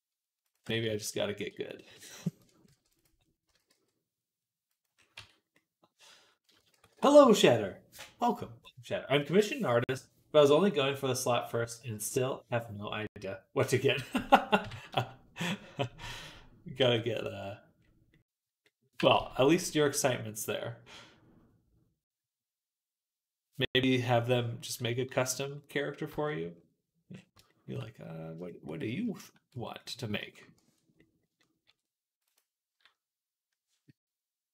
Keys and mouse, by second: 0.5 ctrl+z, 1.3 g, 2.3-4.9 ctrl+drag, 2.5 ctrl+r, 3.1 middle click, 3.3 s, 5.0 Tab, 5.2 click, 6.6 ctrl+s, 14.4 KP_3, 15.7 shift+middle click, 16.6 g, 17.0-18.5 drag, 18.8 g, 24.1-25.3 middle drag, 25.6-28.5 middle drag, 28.6 middle click, 29.4 Tab, 30.8-34.5 ctrl+drag, 31.5 ctrl+r.